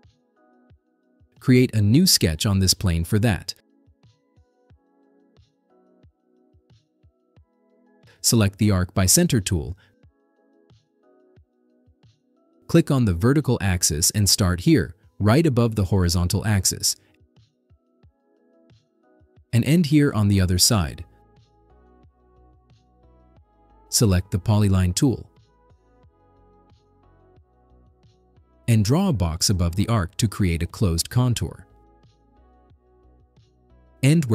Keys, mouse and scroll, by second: 1.7 click, 5.2 click, 11.0 click, 11.5-12.2 scroll down 3, 13.8 click, 14.2-15.7 scroll up 12, 15.7 middle click, 18.0 click, 18.3-19.5 scroll down 10, 19.9 scroll up 2, 20.2 middle click, 20.4 middle click, 20.7 middle click, 21.1 middle click, 22.1 click, 28.0 click, 29.4 click, 29.7-30.4 scroll down 7, 31.7 click, 32.1 right click, 33.9 click.